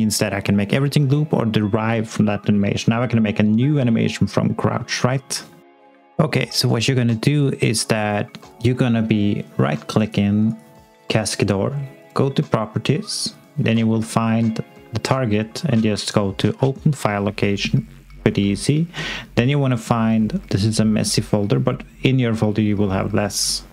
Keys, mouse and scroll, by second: 5.7 click, 9.9 right click, 12.0 click, 19.4 scroll up 1, 23.1 click.